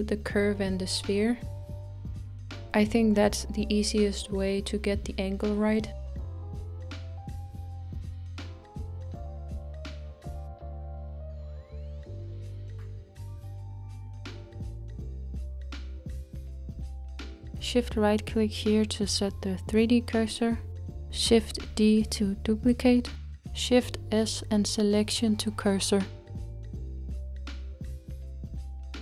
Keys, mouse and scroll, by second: 0.0-3.3 middle drag, 3.3 r, 7.1-7.8 scroll down 4, 7.8-14.7 middle drag, 14.7-16.5 scroll up 2, 16.5-19.8 middle drag, 19.8-22.3 shift+right drag, 22.3 shift+d, 26.3 shift+s, 27.4-29.0 middle drag.